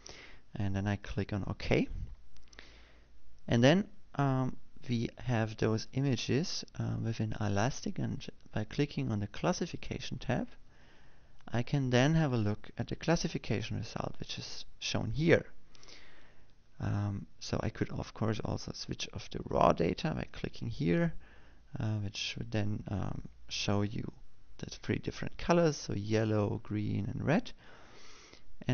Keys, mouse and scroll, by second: 3.4 click, 11.4 click, 22.1 click.